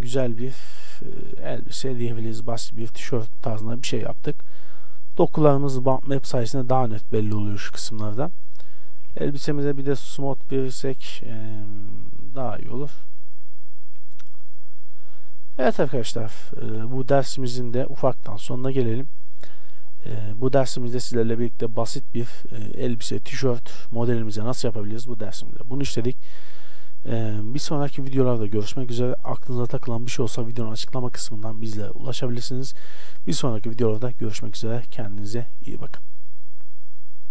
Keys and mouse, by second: 0.1-0.8 middle drag, 0.9 middle click, 1.9 middle click, 2.1 middle click, 2.3 middle click, 8.8 shift+z, 9.7 t, 12.7 t, 13.9 a, 16.9 shift+space, 17.5 shift+a, 21.3 shift+space.